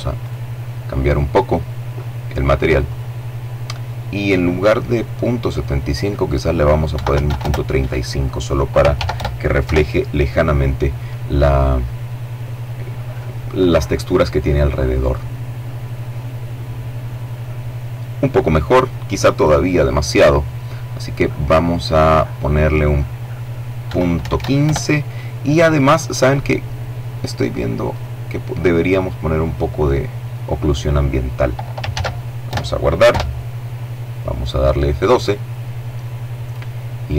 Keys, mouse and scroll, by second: 0.7 click, 1.6 click, 4.3 click, 5.7 KP_Decimal, 5.9 KP_3, 6.0 KP_5, 6.2 KP_Enter, 7.7 ctrl+s, 7.9 ctrl+KP_Enter, 8.4 ctrl+F12, 20.4 click, 22.5 KP_Decimal, 22.9 KP_1, 23.1 KP_5, 23.3 KP_Enter, 24.9-26.1 scroll up 2, 26.6 click, 28.1 click, 30.6 ctrl+s, 31.1 ctrl+KP_Enter, 31.8 F12.